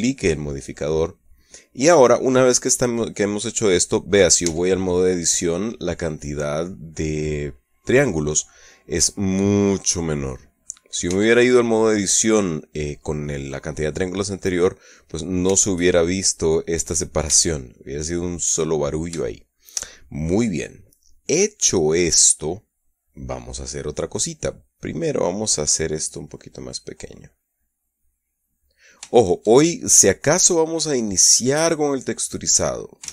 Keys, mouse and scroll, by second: 1.8-3.4 middle drag, 3.8 middle click, 4.8 Tab, 5.5-9.0 middle drag, 9.4-11.5 middle drag, 11.5 Tab, 15.2-16.0 middle drag, 15.9 Tab, 17.7 Tab, 18.0-19.2 middle drag, 19.7-21.2 shift+middle drag, 26.7 click, 27.7-29.2 drag, 29.6-30.8 shift+middle drag, 31.7-33.1 drag.